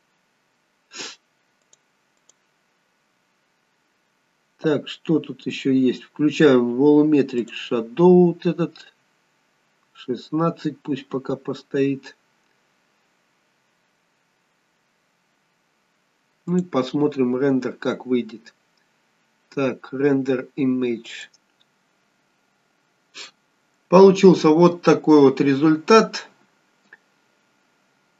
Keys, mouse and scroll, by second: 0.1 click, 1.9 click, 3.1 click, 4.2-6.0 scroll down 2, 7.7 click, 12.3-13.3 scroll up 2, 13.7-14.7 scroll down 1, 14.7-15.7 scroll down 1, 16.8 click.